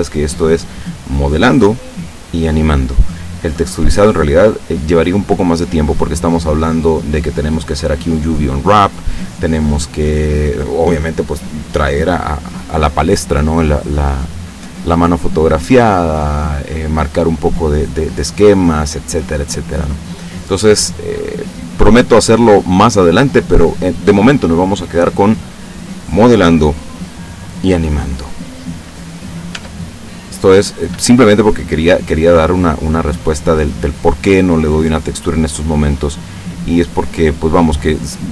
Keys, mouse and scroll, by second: 21.5-24.2 drag, 28.3-29.3 drag, 29.6 Tab, 30.1-33.4 middle drag, 33.8 right click, 35.1 right click, 35.6 middle click, 37.0 right click, 37.4-38.3 middle drag.